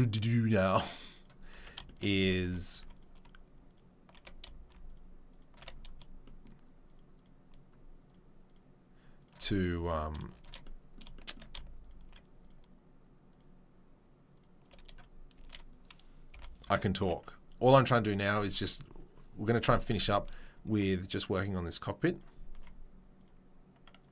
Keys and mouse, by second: 0.7 click, 0.8 middle click, 1.1 click, 1.2-2.9 middle drag, 1.5 Tab, 2.4 3, 2.9 alt+click, 3.0 alt+middle click, 4.1 shift+middle click, 5.6-6.9 shift+middle drag, 6.9 shift+middle click, 7.2-13.3 shift+middle drag, 13.3-14.7 shift+right drag, 14.7-17.0 middle drag, 15.4 shift+d, 16.3 p, 17.0 Tab, 17.2 click, 19.8 Tab, 20.7 ctrl+r, 22.5 ctrl+r.